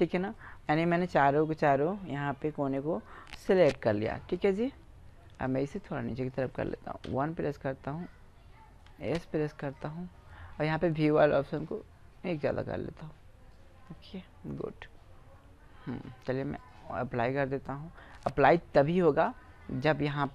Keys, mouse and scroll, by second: 3.5 b, 5.8-7.3 drag, 7.1 KP_1, 8.9 s, 11.6-13.1 drag, 13.1 middle click, 13.6-15.3 drag, 16.6-18.3 drag.